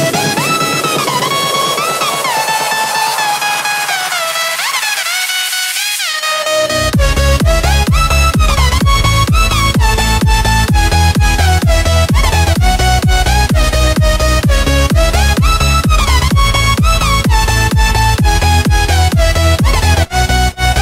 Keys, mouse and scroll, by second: 0.8-2.1 typing, 3.1 click, 6.1 Tab, 6.1 F10, 6.3 right click, 6.9 click, 7.4-9.3 typing, 9.6 Return, 10.5 click, 11.2 Tab, 11.2 F10, 11.8 click, 12.8 right click, 13.6 click, 14.4-16.4 typing, 17.2-19.4 drag, 19.4 Tab, 19.5 F10, 19.6 right click, 20.2 click, 20.7-20.8 typing.